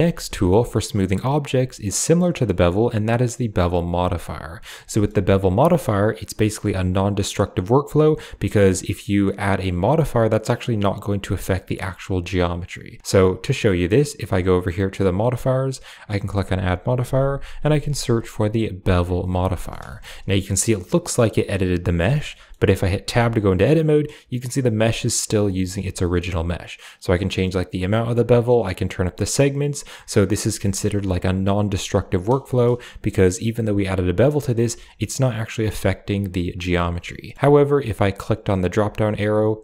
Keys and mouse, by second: 0.4 drag, 1.6 shift+middle click, 1.9 middle click, 2.2 shift+middle click, 4.0 click, 4.8 shift+middle click, 8.5 middle click, 9.7-11.3 drag, 15.0 click, 15.9-18.8 drag, 19.4 middle drag, 19.8 shift+middle click, 22.1 middle click, 22.9 Tab, 25.3 middle click, 25.9 middle click, 26.8-27.8 drag, 28.4 click, 28.6 click, 28.8 click, 28.9 click, 29.1 click, 29.2 click, 30.0 middle click, 30.4 Tab, 30.5 middle click, 32.4 shift+drag, 34.1 click, 34.6 Tab, 35.6 click, 35.7 middle click, 36.6 Tab, 37.3 click, 37.3 middle click, 38.7-39.6 drag.